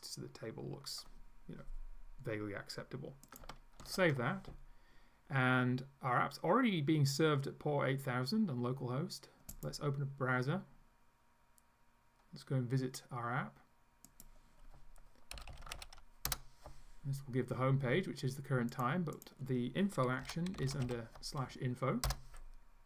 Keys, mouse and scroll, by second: 3.3 click, 3.8 ctrl+s, 9.6 click, 14.2 click, 15.1-16.4 typing, 18.8 click, 19.2 click, 20.0-21.4 typing, 22.2 Return.